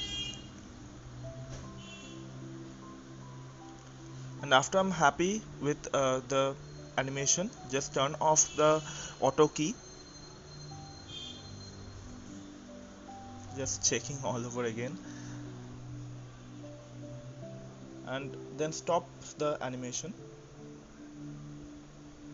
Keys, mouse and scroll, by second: 9.4 click, 21.0-22.3 drag.